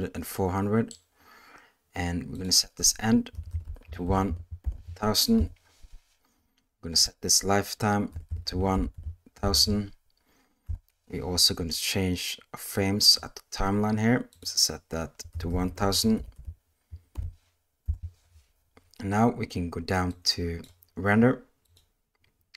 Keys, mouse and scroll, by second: 0.3 middle click, 2.4-5.4 drag, 3.5 BackSpace, 4.3 0, 6.9-10.7 drag, 8.3 BackSpace, 8.9 0, 12.8 click, 14.3-17.9 drag, 15.5 BackSpace, 16.3 0, 20.2 click, 21.7 click.